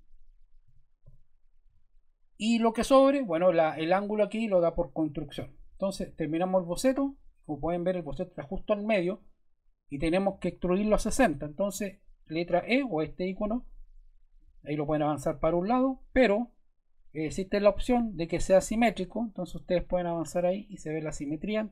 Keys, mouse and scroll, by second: 0.6-1.0 typing, 1.6 Return, 6.7 click, 13.2 click, 14.4 click, 17.4 click, 18.4 click, 19.9 click.